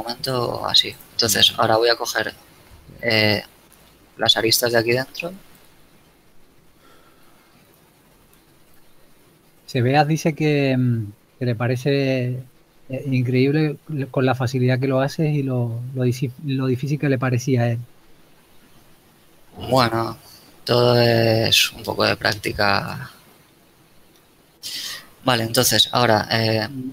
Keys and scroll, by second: 0.5 ctrl+Tab, 11.5 ctrl+z, 12.9 KP_Decimal.